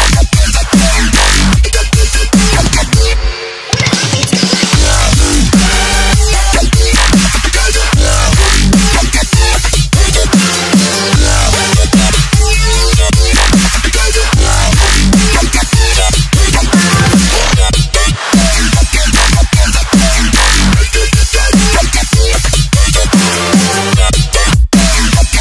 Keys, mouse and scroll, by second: 0.3 click, 1.2 Delete, 1.4 click, 6.0 Return, 6.3 click, 6.6 scroll down 1, 7.1 click, 8.9 click, 11.6 Return, 11.8 click, 12.9 Delete, 14.7 ctrl+Num_Lock, 15.0 t, 15.4 click, 16.6 Down, 17.1 Return, 18.4 click, 22.0 ctrl+c, 22.2 alt+Tab, 23.0 v, 23.4 click.